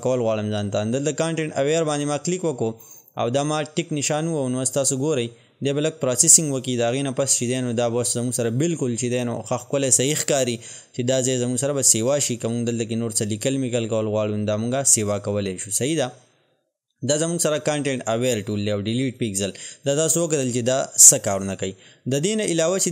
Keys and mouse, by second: 18.0 click.